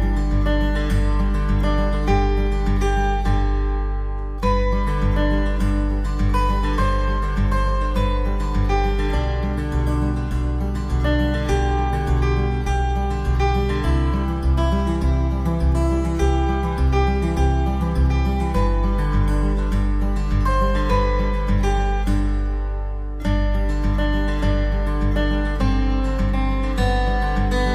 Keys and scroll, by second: 0.1 ctrl+z, 1.8 ctrl+z.